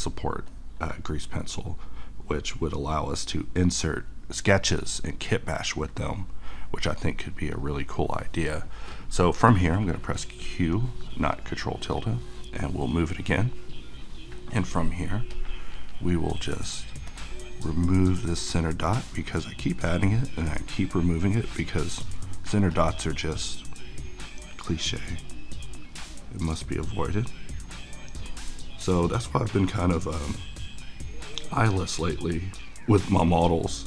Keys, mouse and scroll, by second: 8.0-9.9 middle drag, 10.7 click, 11.0 q, 12.0 click, 12.6-15.3 middle drag, 15.3-33.8 drag.